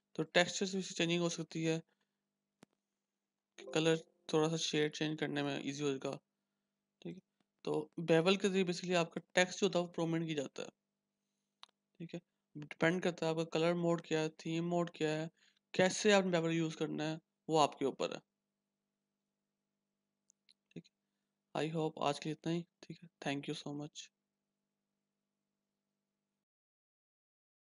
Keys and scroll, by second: 4.5 -, 5.3 ctrl+-.